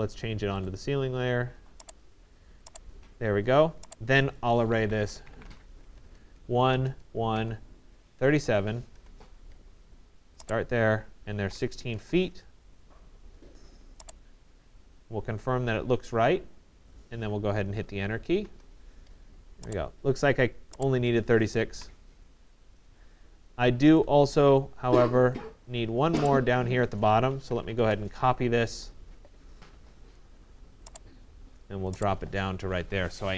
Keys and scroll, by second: 5.5 Return, 11.1-11.9 typing, 12.0 Return, 18.0 Return, 21.7 Delete, 27.3 Return, 32.2 Escape.